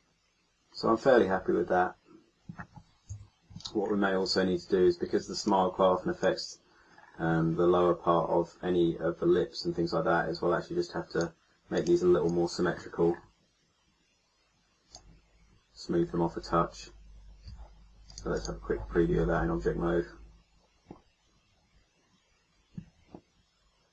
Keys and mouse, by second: 3.1 KP_1, 3.8-5.4 middle drag, 5.4 click, 11.1 middle click, 15.8-18.0 middle drag, 17.4 a, 19.3 a.